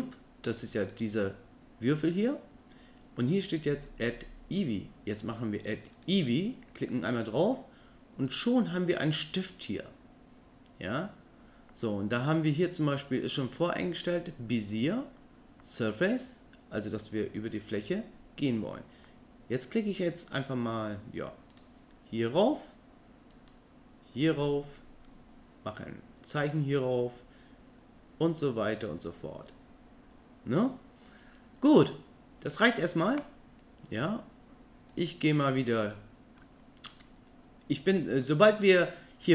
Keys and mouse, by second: 5.9 click, 21.5 click, 23.3 click, 25.1-26.6 drag, 28.3 click, 35.9 middle click, 37.9 middle click.